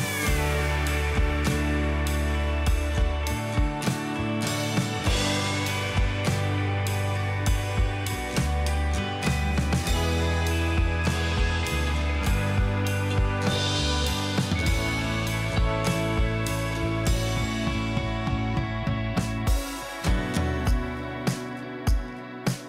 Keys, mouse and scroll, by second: 21.7-22.4 alt+scroll down 1, 22.4 alt+scroll up 1.